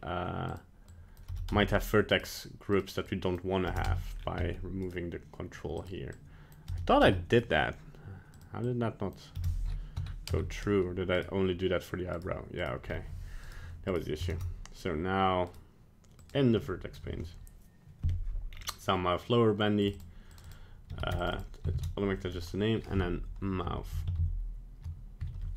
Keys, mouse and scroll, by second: 0.5 click, 2.2 right click, 2.7 click, 4.2 scroll down 2, 4.4 middle click, 4.9 right click, 5.8 click, 7.4 right click, 8.4 click, 11.2 right click, 12.2 right click, 12.6 right click, 12.9-13.5 scroll up 2, 13.5 right click, 13.9 right click, 14.3 ctrl+Tab, 15.5 right click, 16.2 click, 16.7 shift+middle click, 18.5 scroll down 4, 19.8 click, 19.9 click, 20.5 click, 21.3 click.